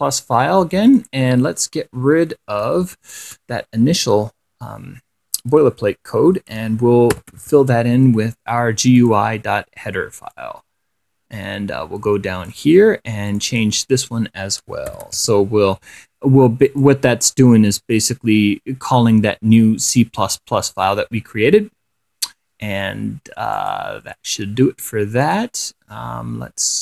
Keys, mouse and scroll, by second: 1.2 click, 2.2 4, 3.3 ctrl+shift+6, 7.2-8.3 typing, 9.3 click, 10.6-13.0 drag, 13.6 click, 14.9-15.9 typing, 17.0 click, 23.8 click, 25.5 click.